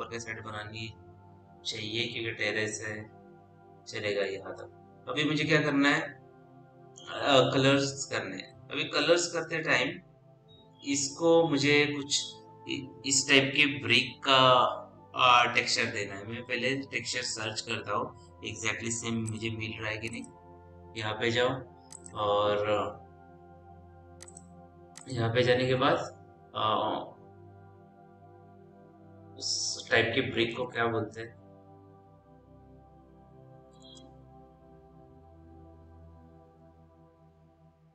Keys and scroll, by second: 30.7-31.6 typing, 33.9-37.0 typing.